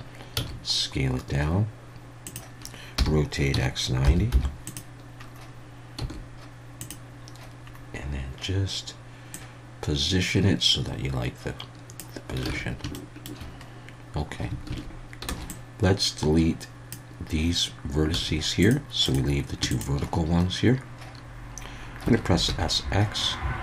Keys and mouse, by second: 0.3 s, 2.2 click, 3.4 r, 3.5 x, 4.0 9, 4.3 0, 4.7 click, 6.0 s, 6.8 click, 9.4-12.0 drag, 12.4 a, 12.9 shift+click, 13.0 shift+middle click, 14.7 alt+a, 15.3 b, 18.1 x, 19.0 click, 22.0 s, 22.5 x.